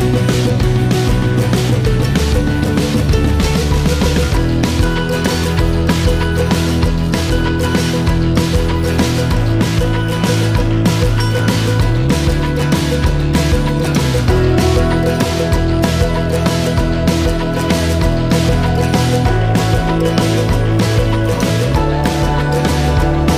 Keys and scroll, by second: 0.1 typing, 0.7 Return, 2.8-3.3 typing, 3.6 Return, 16.3-17.0 typing, 17.6 Return.